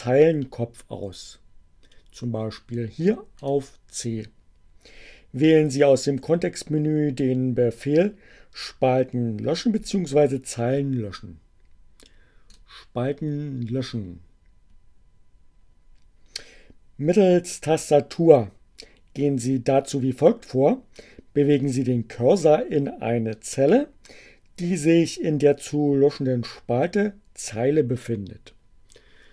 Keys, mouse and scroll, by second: 2.7-3.7 right drag, 12.4 click, 29.2 click.